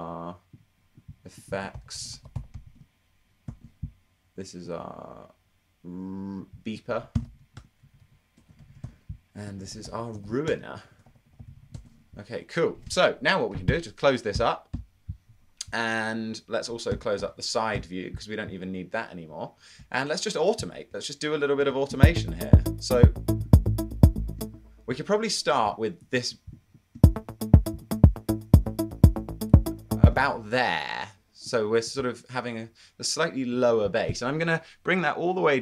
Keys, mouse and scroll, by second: 1.6-3.5 typing, 6.9-12.0 typing, 13.7-14.4 typing, 17.5-18.2 typing, 23.0 space, 24.5 space, 27.2 space, 30.8 space.